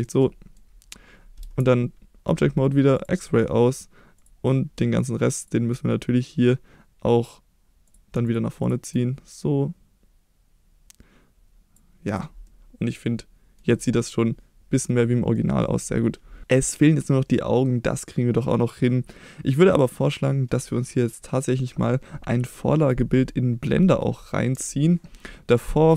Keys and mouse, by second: 0.0 middle click, 1.4 Tab, 2.9 click, 4.1 click, 4.9 shift+click, 5.4 shift+click, 7.8 click, 8.2 shift+click, 8.6 shift+drag, 9.2-11.7 drag, 12.0 click, 12.4-13.6 middle drag, 14.0-14.8 middle drag, 15.3 middle drag, 24.6 KP_1.